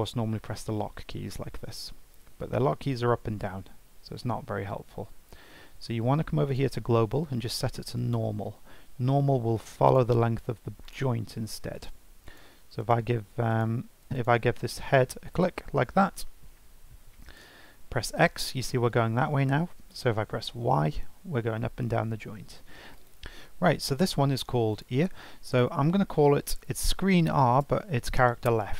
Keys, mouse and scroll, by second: 6.4-9.5 drag, 9.8 click, 10.8 click, 11.7 click, 12.2 click, 12.8 click, 13.5 click, 14.0 click, 14.7 g, 23.0 click, 23.8 F2.